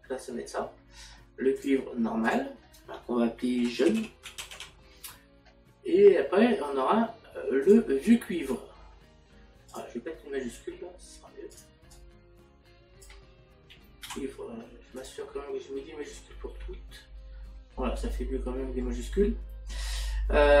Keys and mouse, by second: 3.3 click, 4.6 typing, 9.7 click.